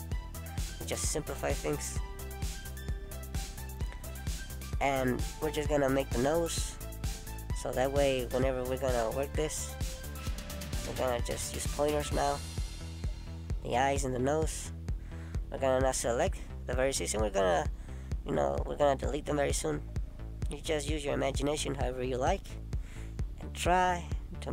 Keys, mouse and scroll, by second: 0.3 click, 0.8 middle click, 2.1 click, 3.3 click, 5.1 middle click, 6.1 click, 7.2 middle click, 8.2 click, 9.3 middle click, 10.4 click, 10.8 middle click, 12.0 click, 13.1 middle click, 20.1 middle click.